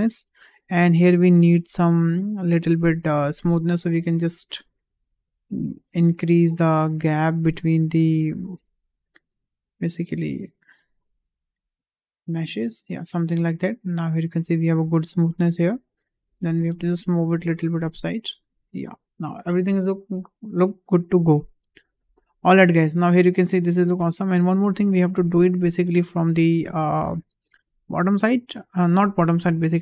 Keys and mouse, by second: 0.4 click, 0.6 Tab, 3.2 g, 5.6 click, 6.0 alt+click, 7.6 alt+click, 8.5 g, 12.1 alt+click, 13.4 Tab, 14.7 Tab, 16.6 g, 18.3 click, 18.6 Tab, 19.9 shift+middle drag, 21.2 middle click, 22.2 `, 23.5 middle click, 24.3 shift+middle drag, 24.5 Tab, 25.4 middle click, 29.3 click.